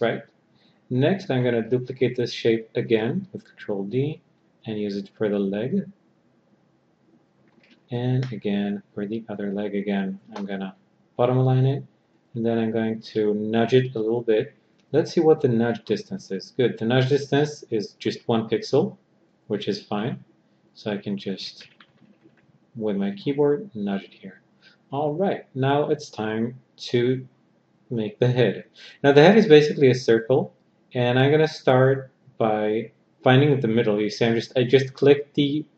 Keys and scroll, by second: 2.6 ctrl+d, 7.4 ctrl+d, 10.5 b.